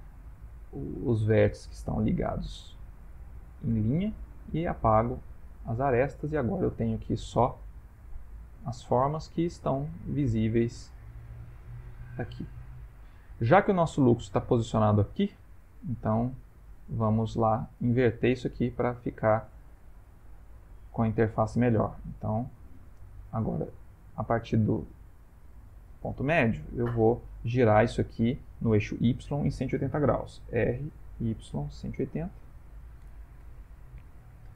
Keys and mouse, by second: 2.2 x, 5.3 ctrl+middle click, 5.6 ctrl+middle click, 6.0 ctrl+middle click, 6.1 ctrl+middle click, 6.5 ctrl+middle click, 7.0 Tab, 7.7-8.0 shift+middle click, 8.8 middle click, 9.8 shift+middle click, 10.0 shift+middle click, 10.5 ctrl+middle click, 10.6 ctrl+middle click, 11.6 shift+middle click, 11.8 shift+middle click, 12.2 ctrl+middle click, 13.4 middle click, 15.4 shift+middle click, 16.2 ctrl+middle click, 16.4 ctrl+middle click, 16.5 shift+middle click, 16.6 ctrl+middle click, 16.7 shift+middle click, 16.8 shift+middle click, 18.2 click, 18.7 Tab, 19.2 shift+middle click, 20.2 click, 21.7 middle click, 22.7 middle click, 23.5 click, 30.6 r, 33.4 Tab, 33.8 ctrl+middle click, 34.4 shift+middle click.